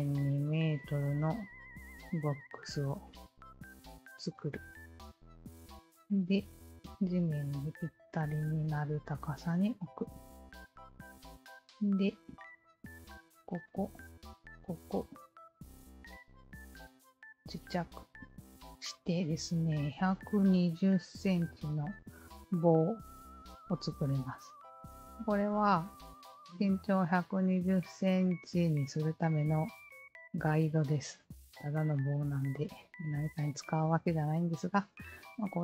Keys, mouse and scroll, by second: 1.6 alt+click, 2.9 KP_0, 2.9 KP_Decimal, 3.6 KP_6, 3.6 KP_0, 4.1 Return, 6.0-10.0 alt+drag, 11.7-12.8 alt+drag, 13.3 alt+click, 14.3 alt+click, 16.0 KP_0, 16.1 KP_Decimal, 16.7 KP_1, 17.5 Return, 19.2 alt+click, 20.1-21.9 alt+drag, 22.3-23.7 alt+drag, 24.1 alt+click, 24.5-24.9 alt+drag, 25.4 alt+click, 25.8-26.7 alt+drag, 27.1 alt+click, 27.9-30.3 alt+drag, 30.9-32.9 alt+drag, 33.5-34.7 alt+drag.